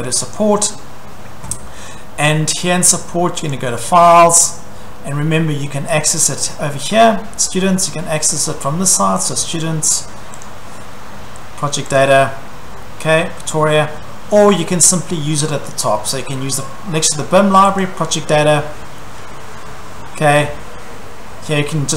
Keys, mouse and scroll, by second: 0.4 click, 3.5 click, 6.0 click, 9.3 click, 10.5 click, 12.0 click, 17.8 click.